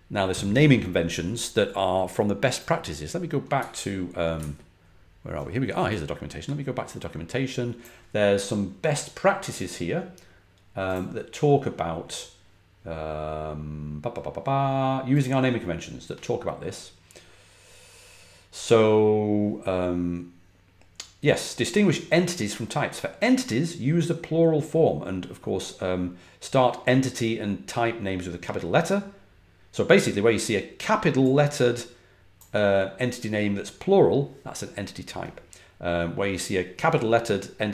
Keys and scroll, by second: 4.3 super+`.